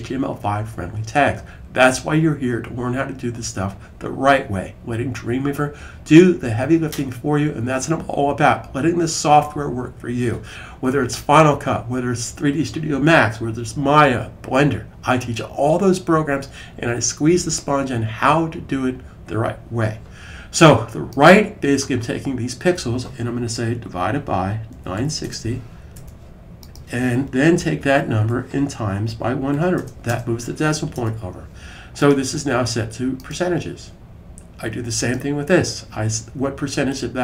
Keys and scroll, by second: 23.6-25.5 typing, 27.4 Right, 27.9 Right, 28.0 Right, 28.1 Right, 28.4-30.3 typing.